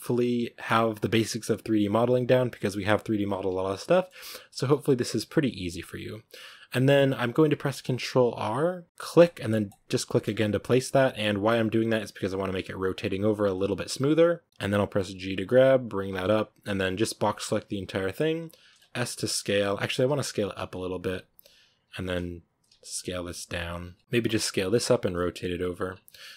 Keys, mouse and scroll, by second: 3.1-3.7 scroll up 3, 3.8-5.5 shift+middle drag, 5.5 ctrl+r, 15.0 g, 16.4 a, 18.2 b, 18.5 s, 19.8-22.8 typing, 23.7 Tab, 24.0 s, 24.5 r, 24.7 g, 25.5 Tab, 25.6 scroll down 4.